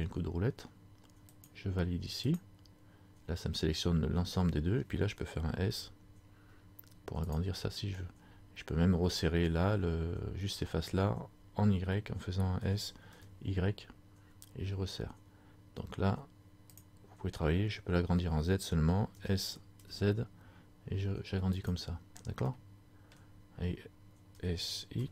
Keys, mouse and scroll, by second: 22.7 middle click, 24.5 s.